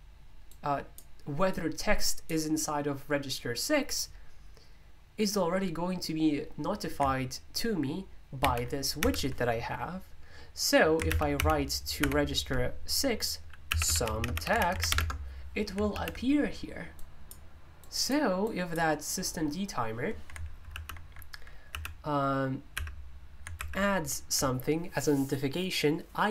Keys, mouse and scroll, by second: 13.4-15.3 typing, 16.9-19.7 drag, 20.9 typing, 22.5-23.2 typing, 23.6 alt+super+i.